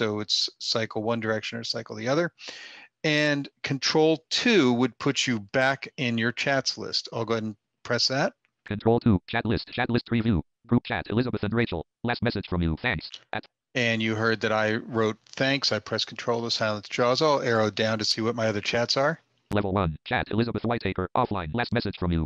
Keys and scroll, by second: 7.4 ctrl+2.